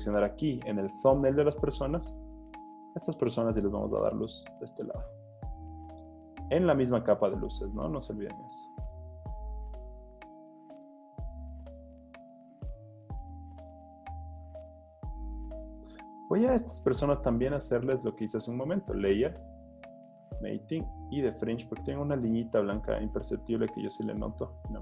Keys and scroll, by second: 2.5 z, 3.3 b, 4.9 super+z, 13.6 super+d, 14.0 z, 15.3 z, 23.4 z, 24.3 z.